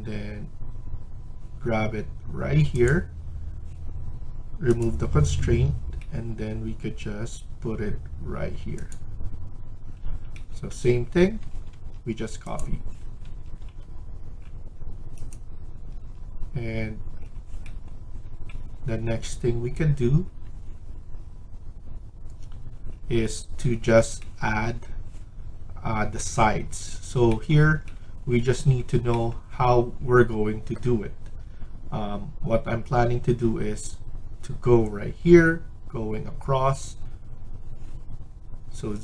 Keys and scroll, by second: 11.1 Escape, 11.4 Escape, 11.6 Escape, 13.1 Escape, 13.5 Escape, 15.8 Escape.